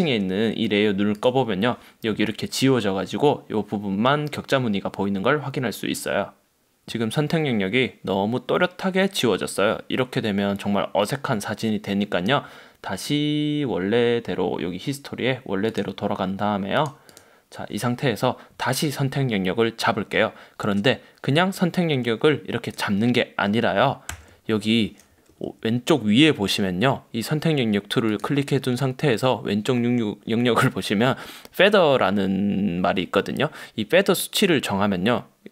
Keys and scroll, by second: 24.2 super+d.